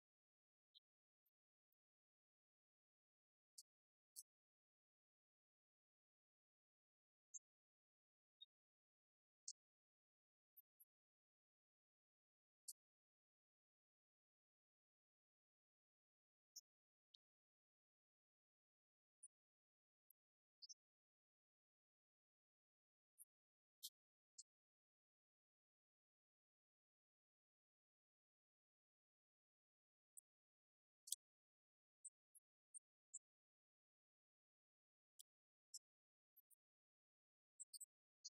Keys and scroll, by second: 0.0-0.3 typing, 1.7-2.6 typing, 4.7 Right, 5.7 Left, 5.8 Delete, 6.3 Right, 6.4 Left, 7.1 Down, 7.8 Right, 8.2-11.9 typing, 14.6 Return, 14.9 Up, 15.2 Left, 15.4 Up, 16.0-19.0 typing, 20.1 Up, 23.2 Right, 23.5 Left, 24.5 ctrl+d, 26.9 Right, 28.2 Up, 28.3 Left, 29.8 Right, 30.1 Left, 30.3 Right, 30.9 Left, 33.9 Down.